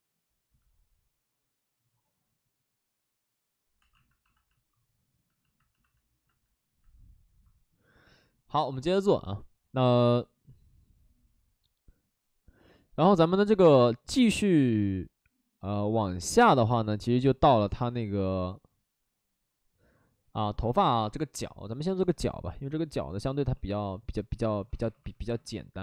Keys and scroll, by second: 3.7 2, 23.2 shift+f, 23.5 shift+f, 24.3 ctrl+d, 24.5 ctrl+d, 24.8 2, 25.0 2.